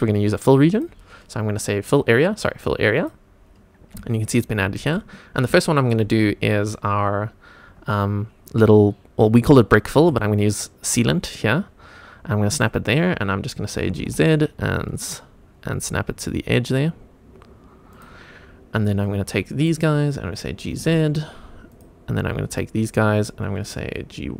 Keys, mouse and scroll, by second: 0.7 click, 3.0 click, 3.7 scroll up 1, 4.1 shift+middle click, 5.3 scroll up 1, 5.6 shift+middle click, 6.2 scroll up 2, 7.2-8.4 scroll down 1, 10.0 g, 12.5 click, 13.9 g, 14.0 z, 17.9 click, 19.0 click, 20.7 g, 20.8 z, 21.7 click, 22.5 click.